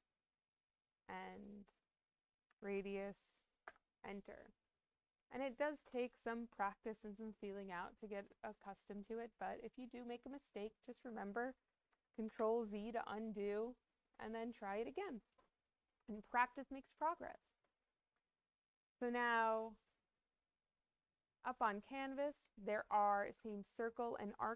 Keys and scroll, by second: 2.4 2, 3.6 Return, 12.2 ctrl+z.